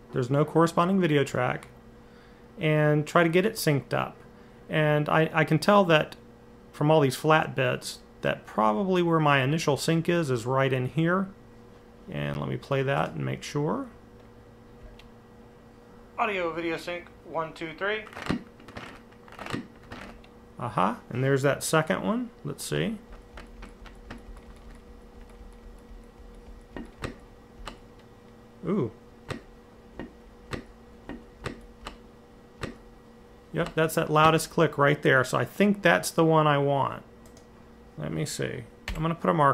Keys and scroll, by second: 22.1 Left, 22.6 Left, 23.0 Left, 23.2 Left, 23.4-24.4 Left, 24.0 Left, 24.1 Left, 24.7 Left, 24.9 Left, 25.1 Left, 25.4 Left, 25.6 Left, 25.9 Left, 30.8 Right, 31.2 Left, 32.4 Right, 33.4 Left, 34.0 Right, 38.7 m.